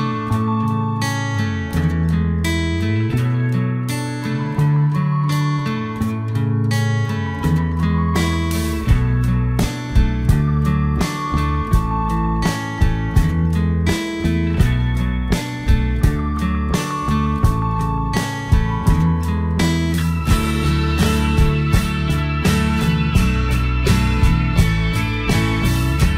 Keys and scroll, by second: 2.3 alt+Delete, 6.8 ctrl+z.